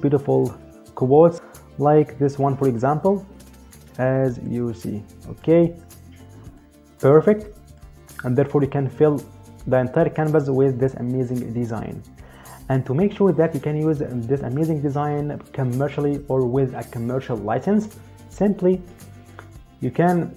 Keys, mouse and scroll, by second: 2.4 click, 4.2 click, 6.3 click, 19.7 click.